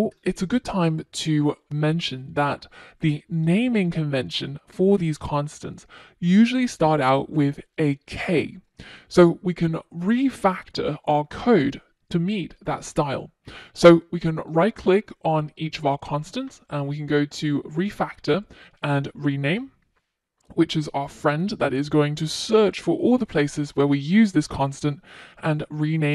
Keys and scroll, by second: 0.3 super+s, 21.4 shift+F6.